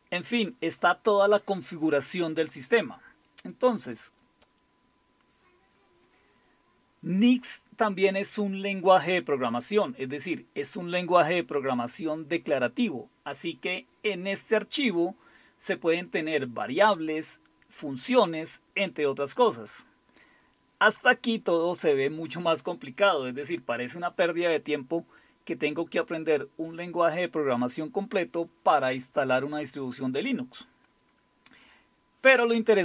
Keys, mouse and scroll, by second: 3.4 click, 4.1-5.0 scroll down 2, 31.1-32.8 scroll down 1.